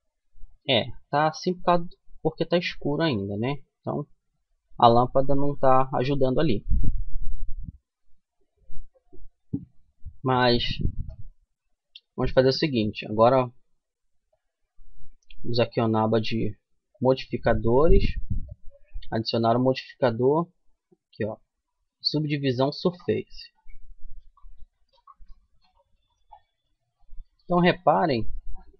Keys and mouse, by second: 0.4-2.8 middle drag, 4.0-12.3 middle drag, 13.6-15.5 drag, 16.3-19.5 drag, 23.5-27.6 middle drag.